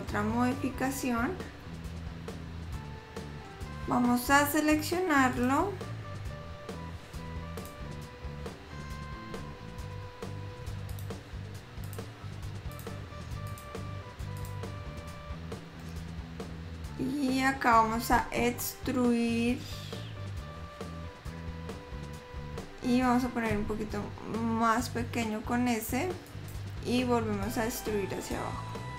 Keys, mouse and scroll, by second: 2.6 scroll up 1, 2.9 middle click, 2.9 scroll down 4, 5.5 click, 7.9 shift+click, 11.3 ctrl+shift+click, 16.1 middle click, 22.6 e, 27.5 e.